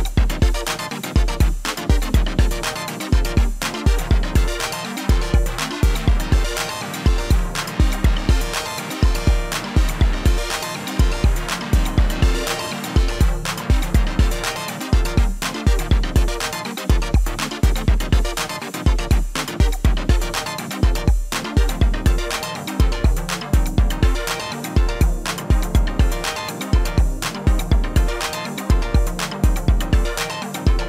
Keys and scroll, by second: 11.3 ctrl+a, 16.1 ctrl+z, 16.8 ctrl+a, 18.3 ctrl+a.